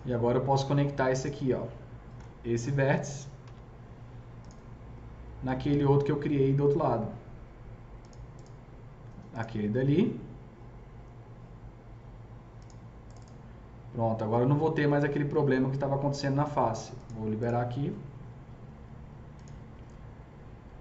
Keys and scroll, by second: 3.3 alt+c, 18.0 F3, 18.5 F4.